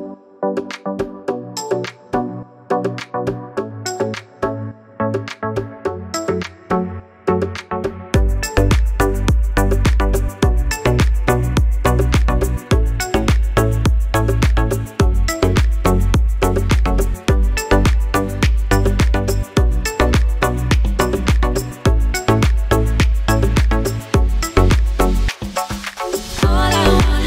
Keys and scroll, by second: 5.7 Tab, 12.2 shift+e, 15.3 Tab.